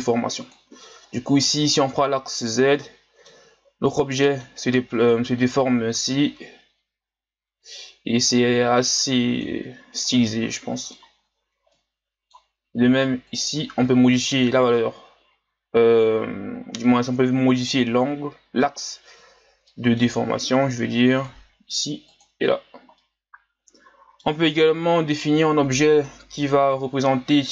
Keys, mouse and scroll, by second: 0.5 click, 1.4-5.6 middle drag, 5.6-8.7 drag, 8.7-11.4 middle drag, 11.4 scroll down 1, 11.7-13.3 middle drag, 13.3 click, 14.1-17.2 middle drag, 19.7-21.2 middle drag, 21.2 click, 22.2 click, 23.0-26.0 middle drag.